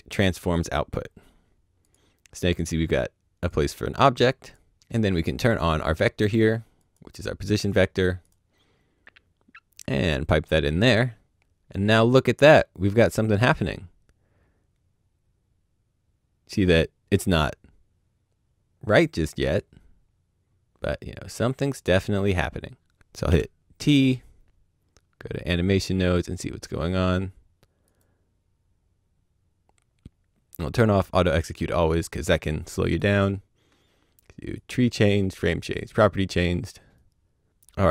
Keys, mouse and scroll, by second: 0.4 click, 3.5 click, 6.8 click, 9.9 click, 13.2 right click, 23.2 right click, 25.3 click, 27.8 click, 32.8 click, 34.5 click.